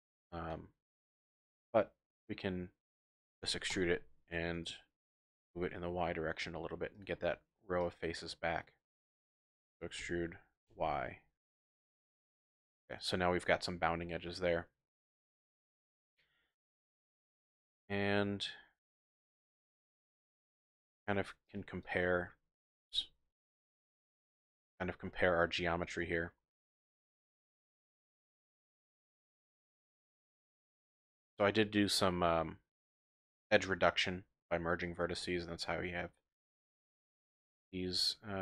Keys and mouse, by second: 0.5 click, 3.4 e, 3.7 x, 4.5 click, 5.1 g, 5.3 y, 6.8-7.5 typing, 6.9 click, 7.8-9.0 drag, 8.7-10.7 typing, 12.8-13.6 typing, 13.0 click, 14.5-15.7 middle drag, 15.7 click, 16.5 click, 16.8 click, 17.1 e, 17.2 middle click, 17.4 click, 19.0 click, 19.1 middle click, 19.6 click, 19.8 middle click, 19.8 click, 20.0 middle click, 20.1 click, 20.2 middle click, 20.4 Tab, 20.7 click, 21.6 typing, 24.0-25.7 typing, 25.1 click, 25.5 middle click, 25.6 click, 26.0 shift+click, 27.4-28.5 drag, 28.0 typing, 37.2 middle click.